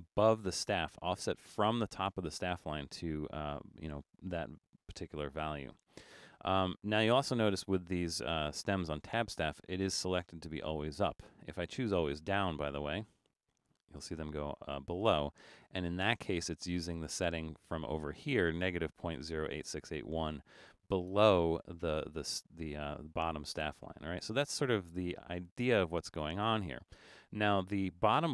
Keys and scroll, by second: 5.2-5.7 typing, 7.5-8.2 typing.